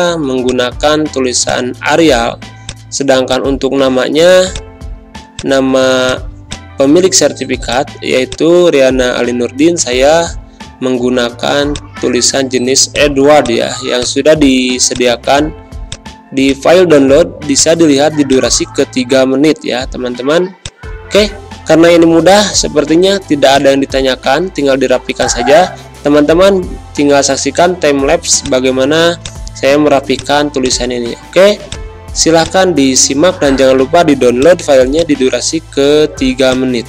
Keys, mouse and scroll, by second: 2.1 z, 2.6 click, 3.1 space, 3.2-11.7 drag, 12.5 ctrl+z, 12.8 click, 16.2 space, 16.4 click, 17.5-36.8 drag.